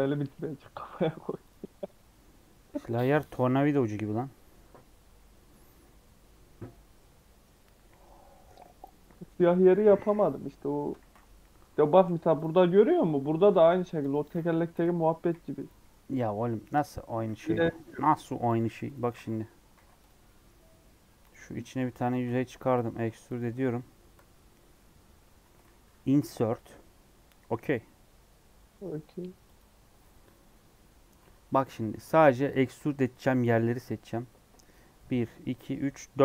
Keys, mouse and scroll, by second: 0.4 s, 1.7-2.1 scroll down 2, 10.7-12.3 scroll up 1, 12.3 click, 12.5 scroll down 2, 12.6 middle click, 13.0 scroll up 2, 13.1 3, 13.4 alt+z, 13.6 middle click, 13.9-15.1 drag, 15.1 KP_1, 15.4 KP_3, 16.2 scroll up 1, 16.8 shift+middle click, 17.2 shift+d, 18.2 p, 18.7 Tab, 18.8 click, 19.1 alt+a, 19.7 alt+z, 19.9 click, 20.2 middle click, 20.6 scroll down 3, 21.1 click, 21.5 middle click, 21.8 Tab, 22.1 a, 22.3 e, 24.0 KP_Decimal, 24.7 middle click, 25.1 scroll down 1, 26.1 i, 31.9 KP_1, 33.0 3.